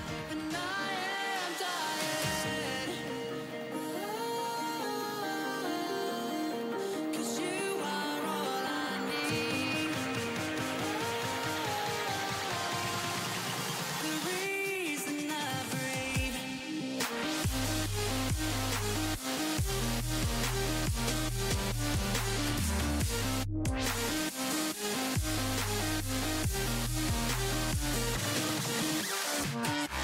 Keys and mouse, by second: 4.4-6.4 drag, 7.2-10.1 drag, 7.2-10.1 right drag, 11.2-13.5 drag, 14.0-15.8 drag, 16.2-18.4 middle drag, 20.5-26.7 drag, 26.7 f, 27.4-30.0 drag.